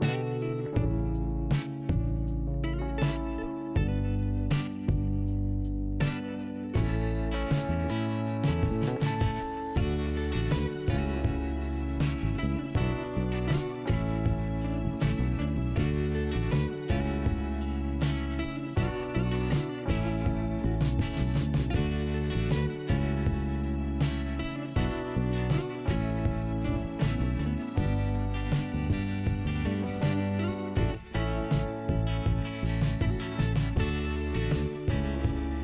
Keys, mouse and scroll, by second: 1.4 click, 5.3 click, 8.6 click, 8.8 click, 8.9 double click, 9.0 double click, 9.1 double click, 9.2 double click, 10.4 double click, 15.7 scroll down 1, 17.1 scroll up 1, 18.8 right click, 19.7 click, 19.9 click, 21.2 click, 22.9 click, 25.1-25.5 scroll down 2, 25.5 click, 28.8 click, 30.8 click, 32.8 click, 33.7 Delete, 33.8 click, 34.1 Delete, 35.2 click.